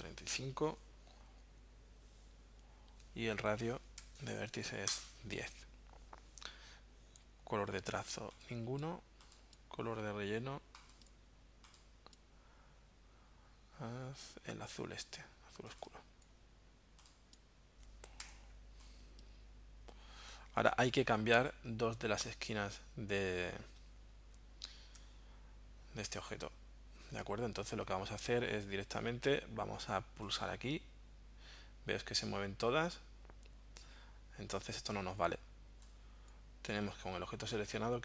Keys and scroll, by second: 0.0-0.2 typing, 3.0 Tab, 3.5-4.4 typing, 4.9 Return, 18.3 v.